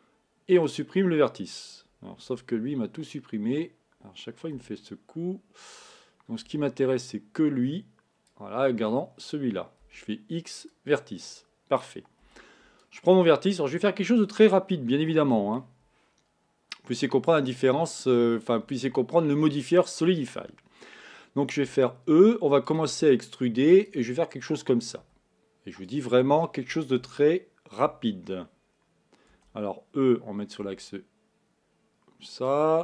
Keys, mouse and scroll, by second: 7.3 b, 15.9 g.